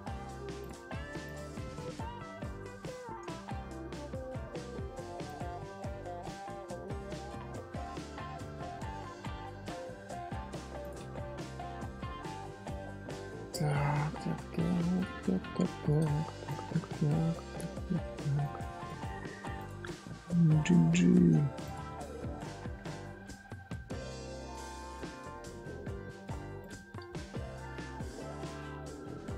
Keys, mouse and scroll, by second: 1.2 shift+click, 2.5 j, 3.4 scroll down 2, 3.5-4.0 middle drag, 4.0-4.3 scroll up 1, 5.3 click, 6.0 scroll down 1, 6.0 scroll up 1, 6.0 scroll down 2, 6.4-8.3 middle drag, 8.3 scroll up 1, 8.5 Tab, 9.2 scroll up 1, 9.3-10.4 middle drag, 10.4-10.8 scroll down 1, 10.8 click, 11.0-11.3 scroll up 4, 11.3 scroll down 1, 11.4 middle click, 12.3 scroll down 3, 12.5 middle click, 12.9 scroll up 1, 12.9 scroll down 1, 13.5 scroll down 1, 13.7-14.9 middle drag, 14.9 alt+click, 16.4 ctrl+click, 17.1-18.4 shift+middle drag, 18.4 click, 19.5 shift+click, 20.0 middle click, 20.4 g, 21.9-23.7 middle drag, 23.7 Tab, 24.0-24.6 middle drag, 24.6 Tab, 24.9 Tab, 26.6 click, 27.1 shift+middle click, 27.7-28.0 scroll up 1, 28.0-29.3 middle drag.